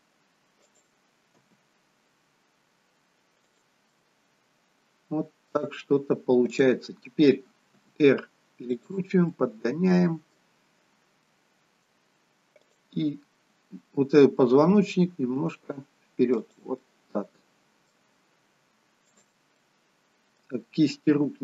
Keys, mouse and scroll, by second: 1.5 g, 4.0 middle click, 6.6 click, 7.8 r, 9.4 middle click, 11.2 middle click, 12.6 click, 14.5-15.2 scroll down 2, 15.2 g, 16.7 middle click, 19.2 click, 19.7 middle click, 21.1 r.